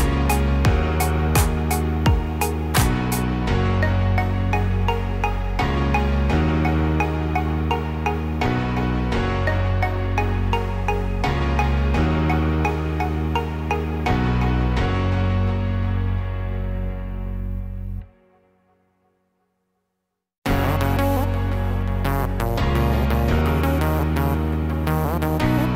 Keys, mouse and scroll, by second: 0.9 click, 2.4 Tab, 3.4 a, 4.6 s, 13.5 shift+middle click, 16.8 middle click.